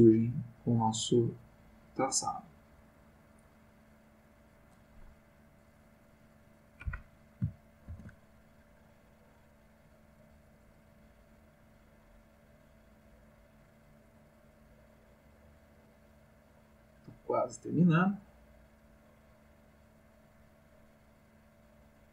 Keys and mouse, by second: 2.2-4.8 drag, 6.0 click, 7.9 ctrl+z, 8.6-22.0 ctrl+drag.